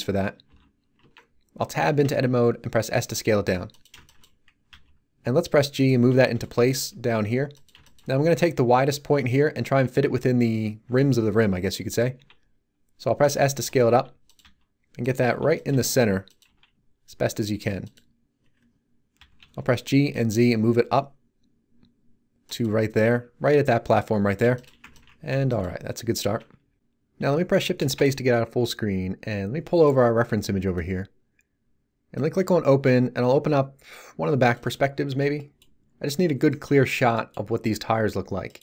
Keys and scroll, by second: 0.4 t, 1.0 Tab, 2.0 s, 4.7 g, 12.1 s, 13.4-16.4 typing, 19.1 g, 19.4 z, 27.8 shift+space.